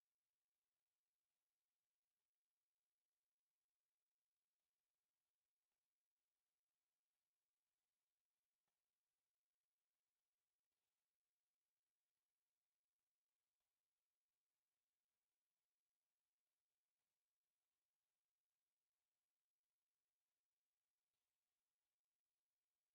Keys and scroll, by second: 2.2 Escape, 2.4 l, 4.2 e, 4.3 space, 4.7 Escape, 4.9 l, 5.3 space, 5.4 Escape, 7.8 e, 7.8 space, 8.9 Escape, 9.1-10.8 typing, 9.5 Escape, 10.6 Escape, 11.1 Escape.